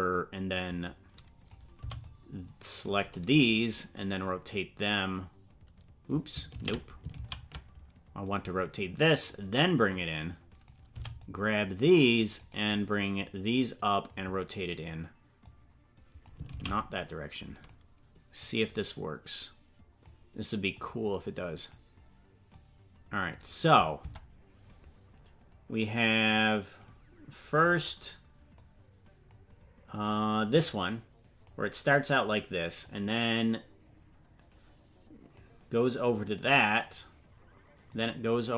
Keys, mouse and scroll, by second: 1.7 c, 4.2-6.1 drag, 6.5 ctrl+z, 7.1 ctrl+z, 8.2-9.3 drag, 9.9 click, 10.9 c, 13.1 click, 15.4 click, 16.5 ctrl+z, 16.9 click, 18.4-20.0 drag, 20.7 click, 22.5 click, 24.0 Tab, 25.8-27.7 drag, 28.5-30.0 drag, 30.5-31.5 drag, 32.8-35.4 drag, 37.9-38.5 drag.